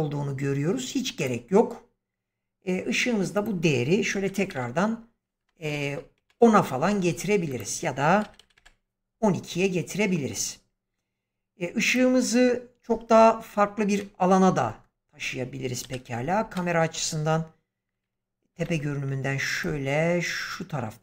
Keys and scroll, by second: 4.0-4.4 typing, 5.6 typing, 6.1 Return, 8.1 typing, 8.5 Return, 15.7 7, 18.5 g.